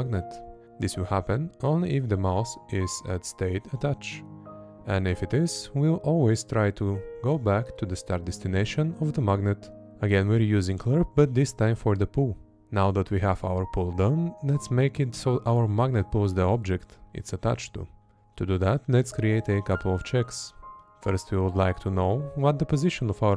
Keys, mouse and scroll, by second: 0.5-2.4 drag, 2.7 space, 4.2-5.8 drag, 6.6 Up, 7.2 space, 8.7 Down, 11.5 Up, 12.1 space, 14.4 space, 17.1 Right, 17.9 Left, 18.5 Right, 19.2 Left, 19.8 Up, 22.6 space, 23.2 Left.